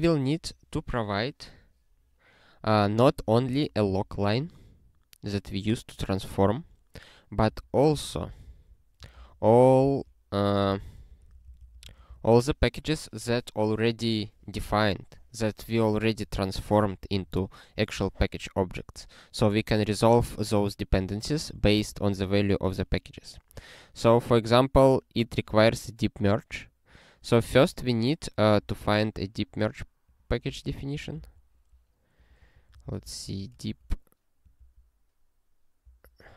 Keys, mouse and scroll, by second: 3.1 ctrl+space, 3.5 ctrl+e, 3.8 ctrl+b, 7.5 alt+b, 8.1 ctrl+g, 8.5 alt+b, 8.7-9.8 typing, 9.9 ctrl+s, 10.6 alt+b, 10.9-12.3 typing, 21.5 ctrl+space, 21.7 alt+b, 22.6 ctrl+g, 23.9 click, 24.6 scroll down 1, 28.7-30.1 scroll down 1, 30.1 click, 30.9 ctrl+b, 31.3 ctrl+e.